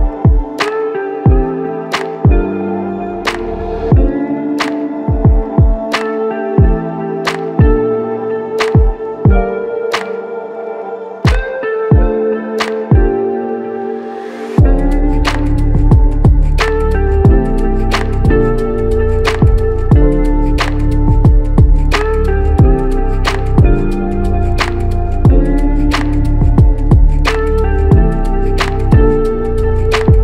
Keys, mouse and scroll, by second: 0.9 ctrl+click, 1.6 alt+shift+click, 2.2 alt+click, 4.2 ctrl+click, 5.3 ctrl+click, 8.9 alt+click, 9.7 alt+click, 10.0 ctrl+click, 11.9 f, 14.2 double click, 17.4 alt+click, 18.7 double click, 20.1 alt+click, 23.0 double click, 24.9 alt+shift+click, 26.6 double click, 27.8 alt+click, 29.5 alt+click.